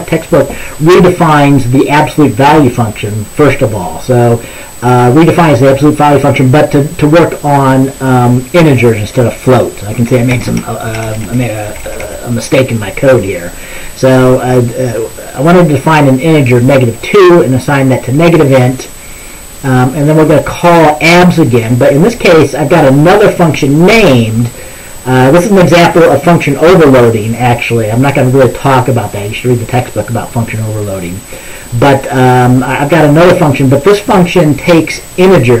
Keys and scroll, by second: 10.6 Right, 11.0 BackSpace, 11.1 BackSpace, 11.3 BackSpace, 11.8 BackSpace, 24.0 ctrl+s.